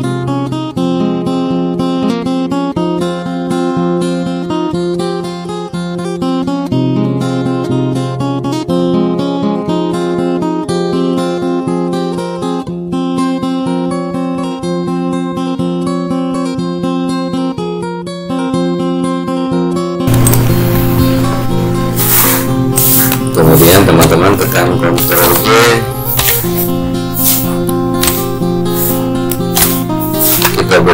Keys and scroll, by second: 24.8 ctrl+g.